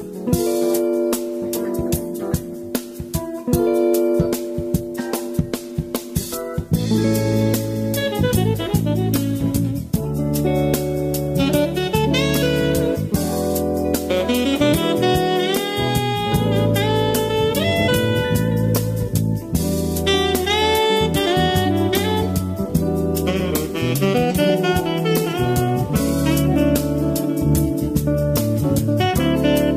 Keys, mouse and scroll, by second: 0.0 space, 0.7-2.4 drag, 2.9 space, 3.5 middle click, 4.2-4.7 scroll down 2, 4.7-5.8 middle drag, 5.8-6.8 scroll up 3, 6.8-7.2 scroll down 2, 7.2-8.7 middle drag, 8.7 space, 9.1 click, 9.9 space, 11.3 click, 11.7-15.9 shift+middle drag, 15.9 space, 16.7-19.2 drag, 19.2 shift+d, 21.3-23.4 drag, 24.3-27.4 drag, 28.0-29.5 drag, 29.5 space.